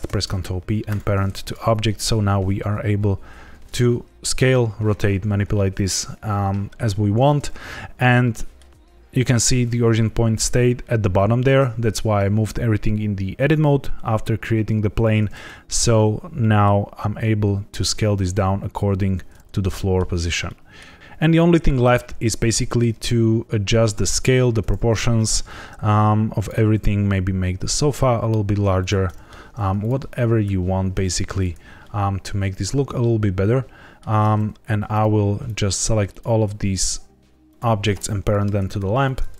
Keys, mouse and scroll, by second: 0.0 ctrl+p, 1.4 click, 2.0 s, 3.3 Escape, 7.9 middle click, 14.9 middle click, 16.3 middle click, 17.7 s, 19.0 Escape, 19.3 scroll down 1, 19.7 middle click, 20.0-20.4 scroll down 3, 20.4 middle click, 21.0 shift+middle click, 21.0-21.5 scroll up 1, 21.5 middle click, 22.4 scroll down 1, 22.6 middle click, 23.0 s, 24.1 click, 25.1 shift+middle click, 26.3 click, 26.7 s, 28.7 click, 29.0 middle click, 29.7 click, 30.1 g, 30.4 y, 31.0 Escape, 31.8 middle click, 34.8 click, 35.4 shift+click, 36.0 shift+click, 37.4 shift+click, 38.5 ctrl+p.